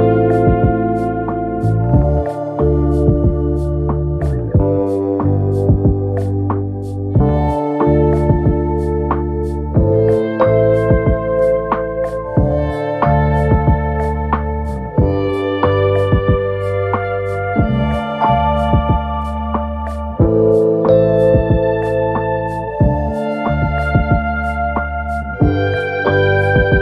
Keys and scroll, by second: 0.0 ctrl+a, 0.6 ctrl+a, 1.1 ctrl+a, 1.5 ctrl+a, 8.1 Delete.